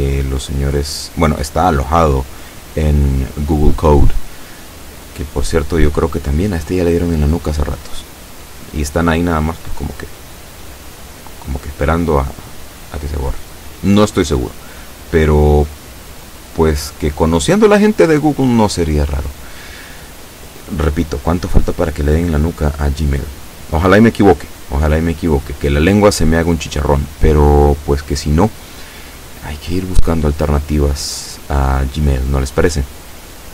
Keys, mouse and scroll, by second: 18.3-20.4 scroll up 1, 23.2-25.5 shift+middle drag, 25.5-26.0 shift+scroll up 1, 26.0-27.0 shift+scroll down 2, 27.0-27.8 scroll down 1, 32.0-33.5 drag.